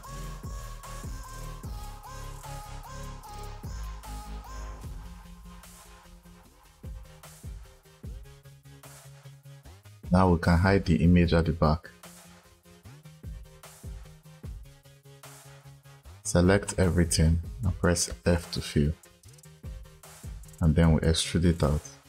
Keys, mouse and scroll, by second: 0.8 click, 1.0 click, 1.5 click, 1.7 click, 2.2 click, 2.8 click, 3.4 click, 3.6 click, 4.1 click, 4.2 click, 4.7 click, 4.8 click, 5.3 click, 5.8 click, 6.4 click, 7.3 click, 8.5 click, 11.7 click, 12.8 click, 15.4 click, 17.9 f, 19.4 click.